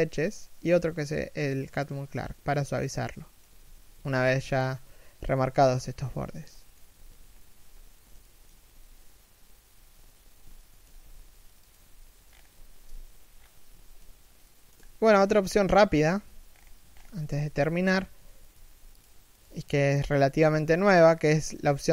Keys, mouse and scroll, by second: 2.8 shift+middle click, 3.7 a, 4.3 right click, 6.3 shift+middle click, 7.3-7.9 scroll down 1, 7.9 shift+middle click, 10.3 alt+shift+middle click, 11.5 a, 12.0-12.5 scroll up 1, 12.5 a, 13.0 scroll down 1, 13.3 a, 14.0 shift+middle click, 16.1-16.8 scroll up 1, 16.8 alt+right click, 17.1 g, 17.8 a, 18.0 right click, 18.1 g, 18.8 right click, 18.9 g.